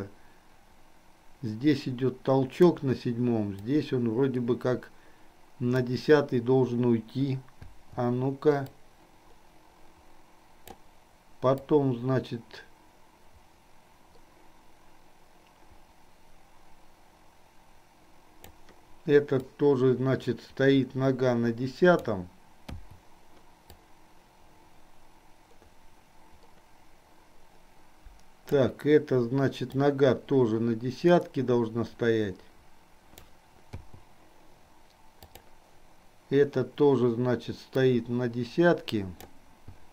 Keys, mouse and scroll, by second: 0.0-2.8 drag, 4.0-6.1 drag, 8.8-10.8 drag, 11.8-18.6 drag, 19.6-22.5 drag, 24.0-28.7 drag, 29.8-33.6 drag, 35.5 click, 37.8 click, 38.3-39.6 drag.